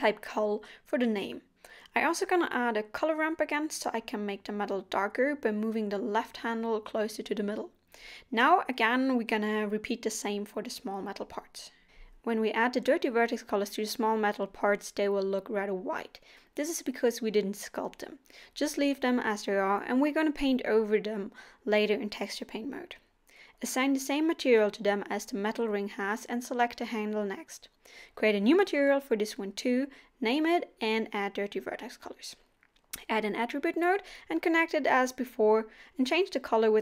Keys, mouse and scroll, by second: 1.5 click, 2.3 shift+a, 6.9 click, 9.2 scroll down 1, 13.9-14.4 scroll up 2, 16.6-17.0 scroll up 5, 19.2 click, 19.4 click, 20.2-20.6 scroll down 5, 22.8 click, 25.3 scroll down 1, 25.7 click, 25.9 middle click, 26.4 middle click, 26.6 middle click, 27.1 click, 28.5 BackSpace, 29.5-30.1 scroll up 2, 29.7 middle click, 32.3 click, 32.3 middle click, 32.7 middle click, 33.5 click, 33.9 shift+a, 34.4 click, 34.7 click, 34.9 click, 35.3 click, 35.4 middle click, 35.7 scroll up 1, 35.8 shift+a, 36.6 click, 36.7 click.